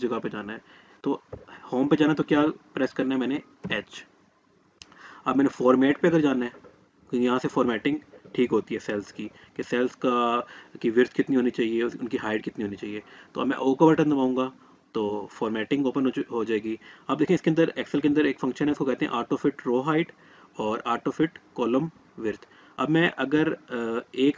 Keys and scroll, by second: 3.4 h, 13.5 o.